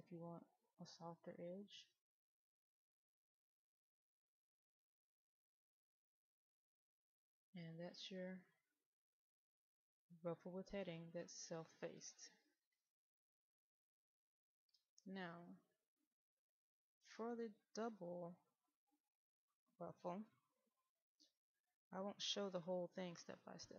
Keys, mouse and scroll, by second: 2.8 click.